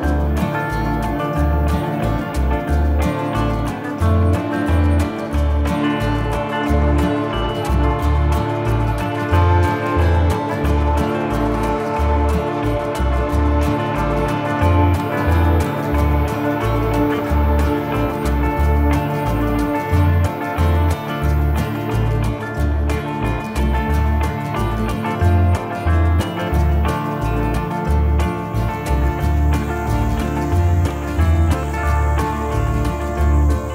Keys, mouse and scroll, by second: 1.2 middle click, 2.2 s, 3.5 middle click, 4.6 g, 5.4 scroll down 1, 5.6 middle click, 6.2-6.8 scroll up 3, 7.1 s, 8.2 g, 9.2 middle click, 9.7 shift+middle click, 10.3 middle click, 12.1 g, 13.5 middle click, 15.2 Tab, 17.4 shift+d, 19.8 click, 24.0 middle click, 25.0 click, 26.0 middle click, 28.4 Tab, 29.5 middle click, 31.9 shift+middle click, 33.2 right click.